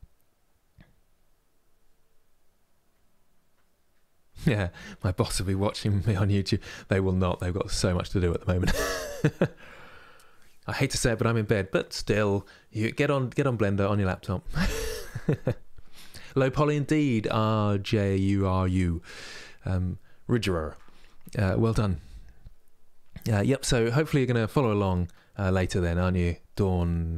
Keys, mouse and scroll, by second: 23.2-26.2 middle drag.